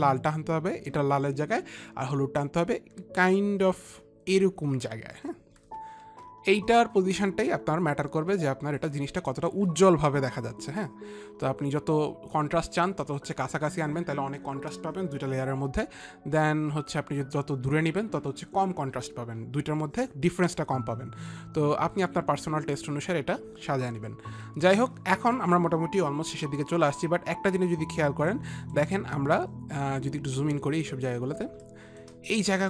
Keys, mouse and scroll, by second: 2.7 click, 7.7 click, 11.4 click, 16.6 click, 21.8 click, 28.2 click, 31.9 click, 31.9 space, 32.2 click.